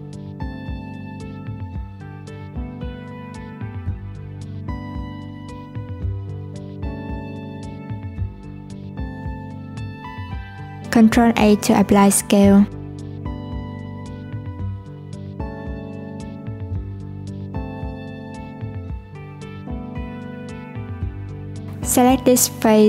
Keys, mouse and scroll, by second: 2.5 click, 5.1-6.2 scroll up 1, 6.2 s, 7.5 s, 9.5 click, 11.3 ctrl+a, 14.3 click, 18.3 click, 19.9-20.9 drag, 20.9 Tab, 21.2-21.7 scroll up 1, 21.7 alt+z, 22.1 click.